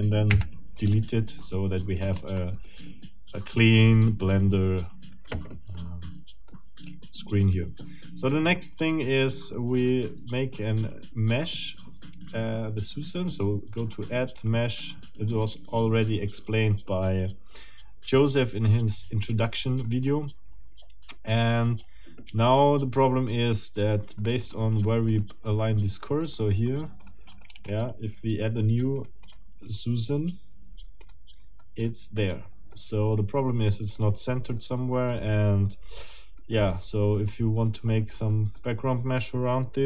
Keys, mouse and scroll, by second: 0.3 Delete, 0.7 click, 1.4 middle click, 2.1-2.6 scroll up 2, 2.7-5.0 middle drag, 5.7 middle click, 9.7 click, 13.9 click, 14.4 click, 14.7 click, 15.3 click, 19.9-21.9 middle drag, 22.9-24.4 shift+middle drag, 24.4 click, 24.9 click, 25.1 click, 26.7 click, 27.5 shift+click, 29.0 click, 31.0 click, 31.6 middle click, 32.7-34.1 middle drag, 34.6 middle click, 36.4 middle click, 37.3 scroll up 1, 37.8-38.3 scroll down 2, 38.3 middle click.